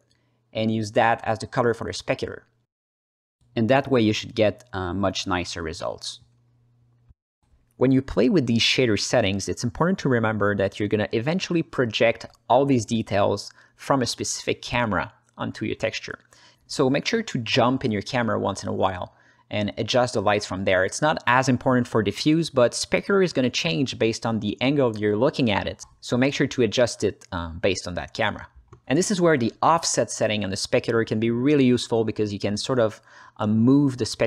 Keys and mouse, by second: 0.5-1.1 drag, 1.5-2.5 drag, 2.8 h, 3.0 ctrl+space, 3.2 alt+middle click, 3.6 ctrl+middle click, 4.2-4.9 drag, 5.6 drag, 6.4 click, 7.3 click, 8.7-12.1 alt+middle drag, 14.2 KP_0, 15.6 ctrl+alt+middle click, 16.4-17.7 shift+middle drag, 18.5 drag, 19.3-24.4 drag, 25.1-25.7 ctrl+alt+middle drag, 27.1-27.8 ctrl+alt+middle drag, 28.5 click, 28.6 ctrl+space, 30.1 drag, 30.7 click, 31.0 h, 31.5 middle click, 31.9 ctrl+alt+middle click, 32.4-34.0 drag.